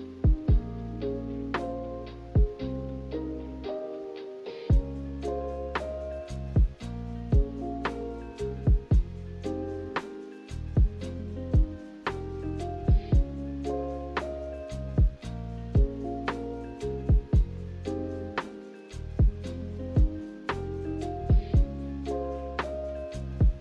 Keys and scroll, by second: 2.1 ctrl+z, 14.2 a, 17.0 Delete, 19.2 a.